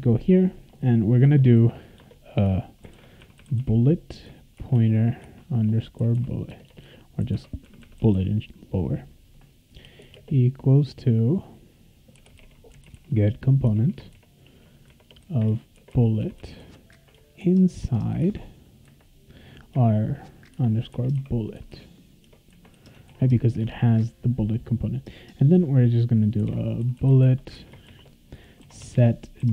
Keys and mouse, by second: 1.2 Return, 1.9 Return, 2.6-8.6 typing, 9.8 space, 10.0 =, 10.1 space, 11.9-18.7 typing, 13.7 Tab, 20.3-22.7 typing, 22.2 Tab, 23.1 ctrl+s, 23.6 Return, 26.1-29.5 typing.